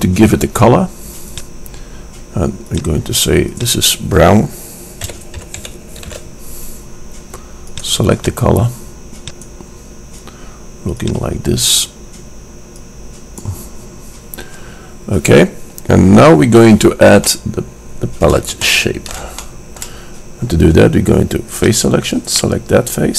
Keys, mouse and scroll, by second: 1.4-5.6 drag, 8.3-10.2 drag, 11.2-15.0 drag, 17.4 middle click, 21.6 click, 22.5-23.1 middle drag.